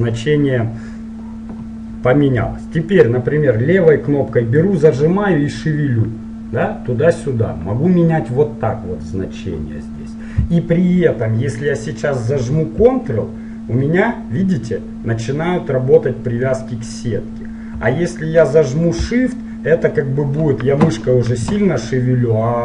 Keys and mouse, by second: 4.6-6.6 drag.